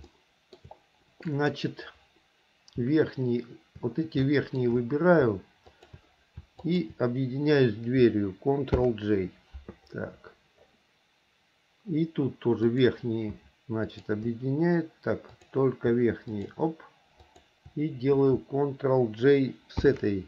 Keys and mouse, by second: 0.3 shift+middle click, 1.5 click, 4.4 shift+middle click, 5.9 shift+click, 6.8 shift+click, 9.0 ctrl+j, 12.8 click, 14.0 shift+click, 15.5 click, 16.5 shift+click, 17.5 shift+click, 20.0 ctrl+j.